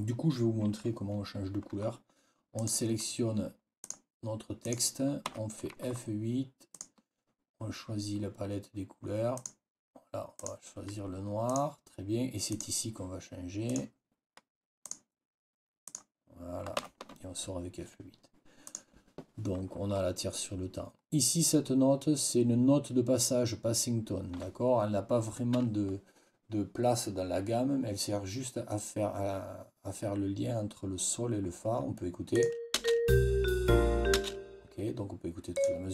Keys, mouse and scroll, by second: 2.4 click, 3.7 click, 4.5 click, 5.2 F8, 6.6 click, 9.2 click, 10.3 click, 11.4 click, 12.4 click, 13.6 click, 14.7 click, 15.8 click, 16.7 F8, 18.6 click, 32.2 click, 32.6 space, 34.0 space, 35.4 click.